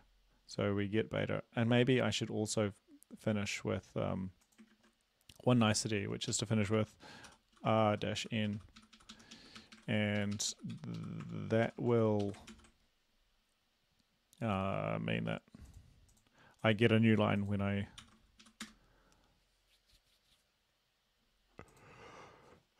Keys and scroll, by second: 4.7 ctrl+`, 6.3 Left, 6.7-12.7 typing, 15.2 ctrl+`, 18.1 ctrl+c, 18.4 Up, 18.7 Return.